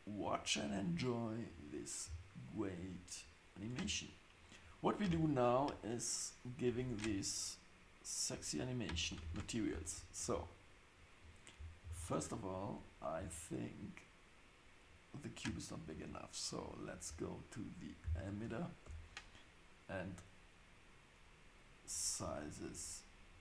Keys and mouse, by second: 8.9 space, 9.2 shift+Left, 16.8 click, 18.8 Tab, 22.2 s.